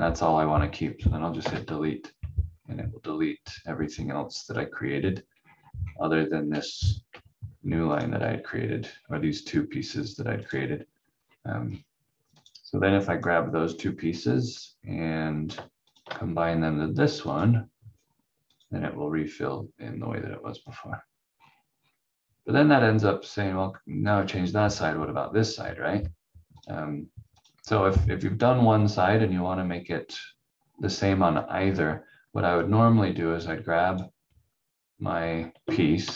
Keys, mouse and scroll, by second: 1.4 Delete, 2.4-3.9 scroll down 1, 5.3 scroll up 1, 6.5 v, 7.0 v, 7.9 click, 8.2 v, 8.9 scroll down 1, 10.4 click, 11.1 scroll down 1, 12.3 click, 13.6 scroll up 1, 15.9 shift+click, 20.3 scroll down 1, 22.7 scroll up 1, 26.5 click, 27.6-28.7 scroll down 1, 31.5-32.6 scroll up 1, 32.6 click.